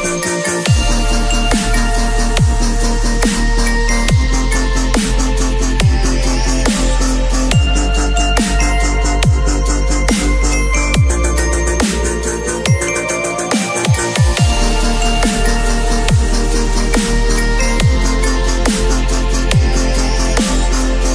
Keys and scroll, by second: 6.4 ctrl+u, 14.2 v, 15.0 ctrl+v, 15.3 ctrl+t.